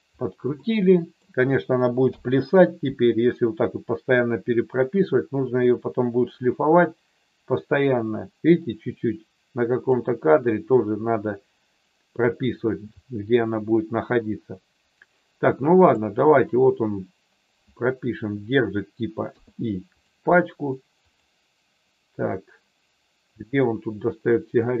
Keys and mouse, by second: 0.5 middle click, 6.8-9.9 drag, 15.8 click, 19.2 i, 21.2 click, 23.6 click.